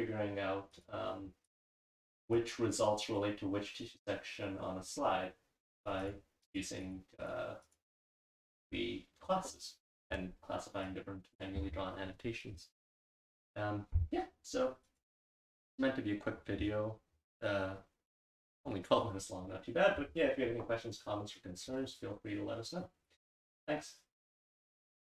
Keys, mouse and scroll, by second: 2.4-2.8 drag, 6.0 click, 6.4 click, 6.8 click, 7.2 click, 7.6 click, 8.0 click, 10.9 click.